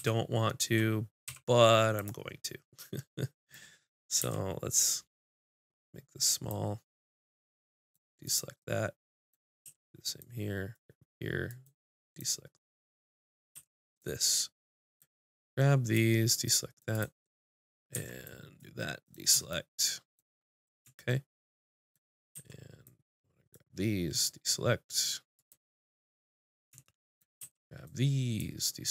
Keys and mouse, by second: 2.0-4.0 drag, 4.0-7.4 middle drag, 4.2 c, 7.4 click, 8.6 middle click, 9.6 c, 12.7 click, 13.5 c, 17.9 c, 21.0 click, 21.6 click, 21.6 right click, 22.3 c, 25.5 click, 25.5 right click, 25.7 middle click, 27.4 c.